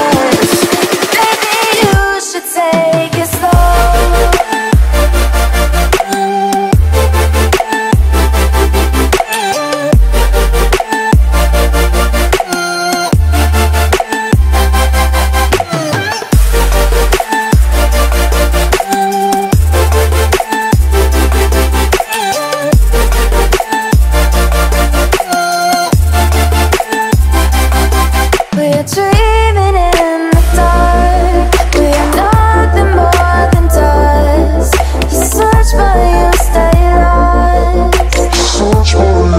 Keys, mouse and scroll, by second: 1.6-3.8 typing, 4.5 click, 4.6 F10, 5.0 right click, 5.8 click, 6.2-7.9 typing, 9.3 click, 10.3 typing, 12.6-15.1 drag, 15.5 click, 18.8 F10, 19.5-24.5 drag, 26.2 F10, 27.4-34.7 drag, 35.6 F10, 36.2-38.2 drag, 37.8 Delete, 38.2 right click, 38.9-39.3 typing.